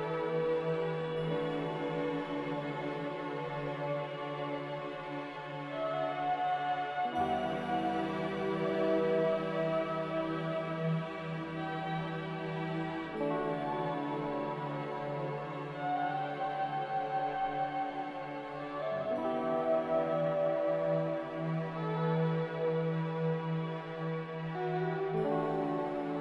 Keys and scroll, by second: 20.6 ctrl+w.